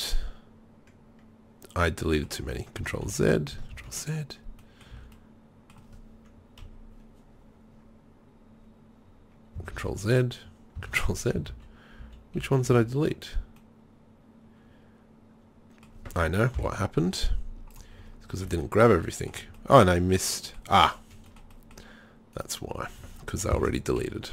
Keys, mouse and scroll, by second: 2.4 Tab, 3.0 ctrl+z, 3.7 ctrl+z, 4.9 z, 6.6 KP_3, 9.8 ctrl+z, 10.9 ctrl+z, 11.5 ctrl+z, 12.1 ctrl+z, 12.4 ctrl+z, 12.8 ctrl+z, 16.6 Delete, 18.5 a, 20.4 middle click, 21.0-21.5 middle drag, 22.4 right click, 23.6 ctrl+l, 24.0 KP_3.